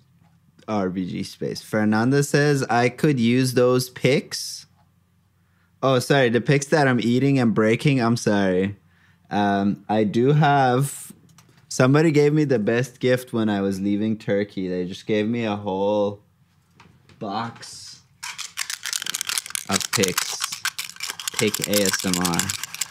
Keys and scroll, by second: 11.7 super+f, 21.5 super+Tab.